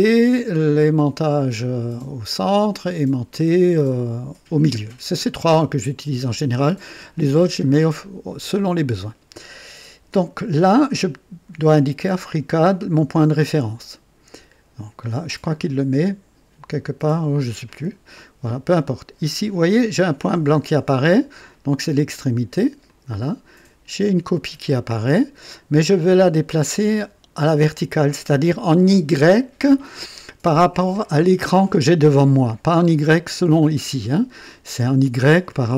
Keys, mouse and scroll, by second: 22.8 click.